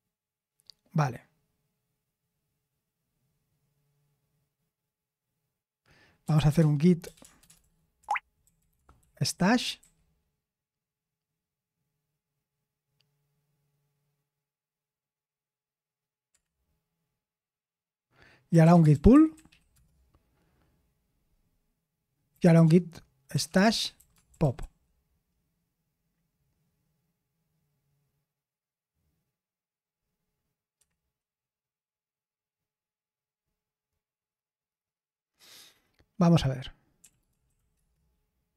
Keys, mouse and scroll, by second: 8.0-10.2 typing, 18.8-19.9 typing, 22.0-25.0 typing, 37.7 Return, 37.7-38.5 typing.